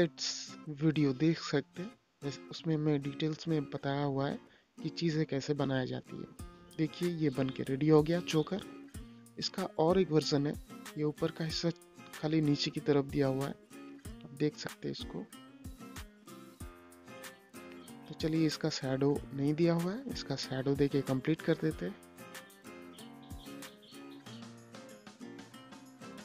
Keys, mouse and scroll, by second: 2.4 click, 3.1 z, 3.8-7.2 drag, 7.6 Page_Up, 9.0 Page_Down, 10.5 Page_Up, 11.9 Page_Down, 13.9 Page_Up, 16.2 Page_Down, 19.3 space, 19.8 ctrl+click.